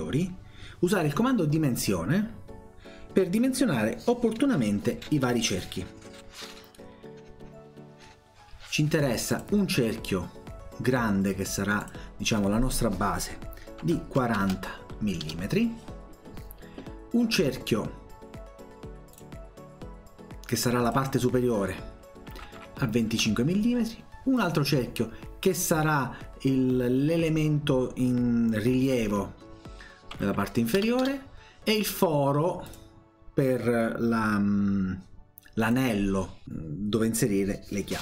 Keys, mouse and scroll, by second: 9.4 click, 11.8 click, 19.1 click, 20.9 click, 24.4 click, 28.9 click, 32.7 click, 35.7 click.